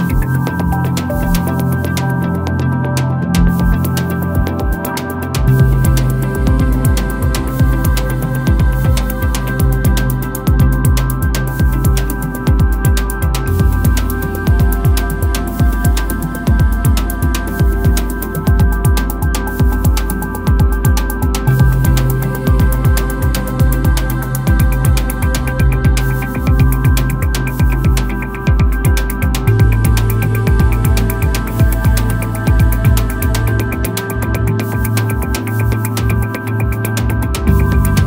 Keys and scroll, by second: 3.5 super+s, 4.4-6.8 typing, 8.6-10.2 typing, 12.5 z, 13.1 b.